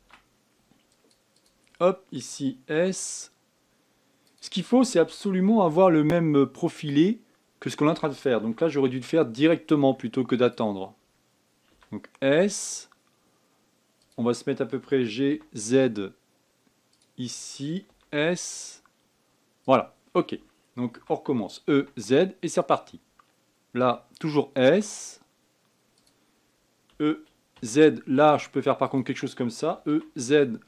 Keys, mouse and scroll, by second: 0.6 ctrl+r, 3.4 s, 5.7 g, 9.1 a, 9.5 b, 12.4 s, 15.5 g, 18.6 s, 21.7 e, 27.6 e, 30.4 e.